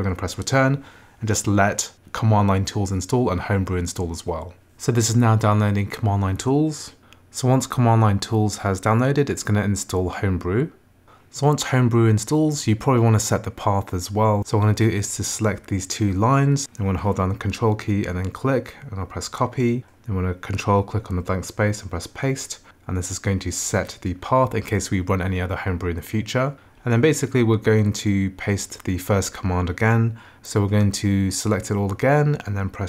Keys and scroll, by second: 23.3 Return.